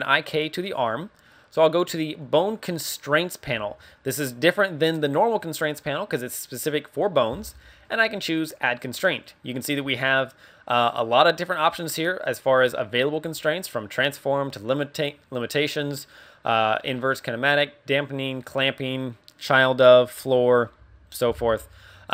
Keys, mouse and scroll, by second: 2.2 click, 8.4 click, 9.4 click.